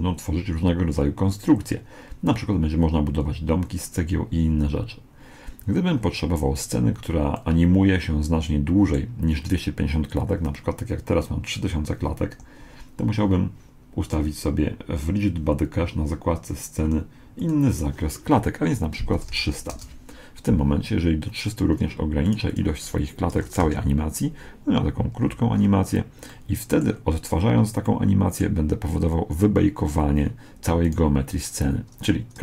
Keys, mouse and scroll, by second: 7.4-9.0 middle drag, 12.3 Escape, 17.4-19.2 drag, 19.5 0, 22.3-24.2 drag, 25.2-29.8 middle drag, 30.8-32.4 right drag.